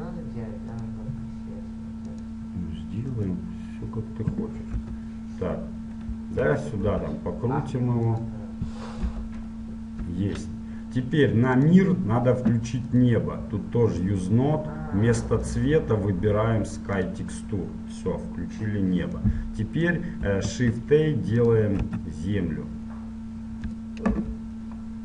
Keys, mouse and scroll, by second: 5.0 KP_7, 6.0-8.2 middle drag, 7.1 r, 9.2 KP_1, 10.0 KP_3, 19.4-21.6 middle drag, 21.6 shift+a, 22.1 s, 24.4 KP_7.